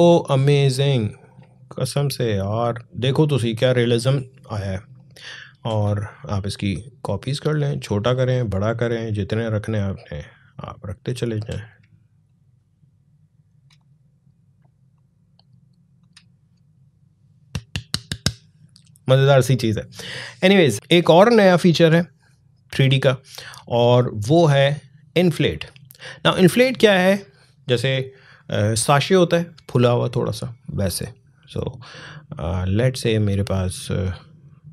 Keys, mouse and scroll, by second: 1.9 alt+scroll down 1, 2.4 alt+scroll up 1, 3.4 click, 4.7-9.0 alt+drag, 9.0-10.3 drag, 10.3-12.0 alt+drag, 12.0-15.8 shift+drag, 20.7-22.8 drag, 31.8-34.7 drag.